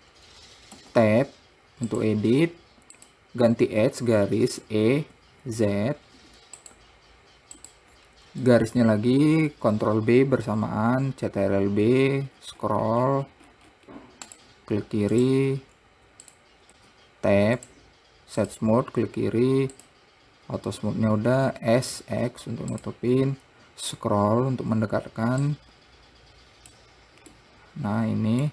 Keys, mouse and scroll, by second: 2.3-3.4 drag, 4.9 e, 7.9 click, 9.9 ctrl+b, 15.5-16.5 right drag, 16.5 click, 17.0 Tab, 17.9-20.1 right drag, 20.1 click, 21.8 s, 24.1-25.8 scroll up 5, 25.8-27.7 drag, 27.7-28.5 middle drag.